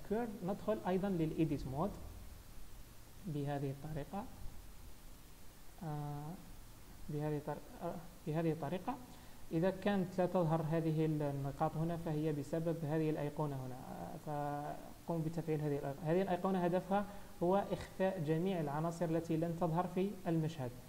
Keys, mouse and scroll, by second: 0.7 Tab, 4.4 click, 6.5 click, 8.5-9.2 scroll up 2, 9.2-9.5 scroll down 1, 10.4 Tab, 11.8 click, 13.9 click, 16.4-19.0 scroll down 11, 19.0 click, 19.0-19.4 scroll down 1.